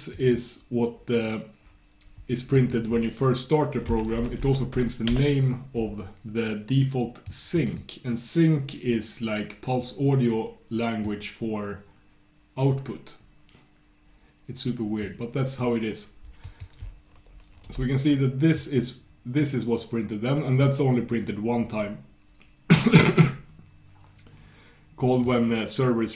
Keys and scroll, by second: 4.0 ctrl+super+k.